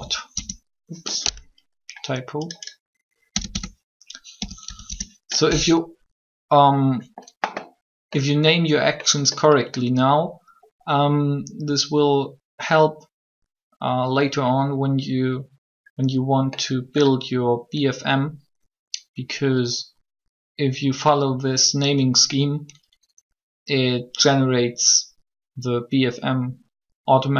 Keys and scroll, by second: 0.2 Return, 3.2-4.8 typing, 4.8 Return.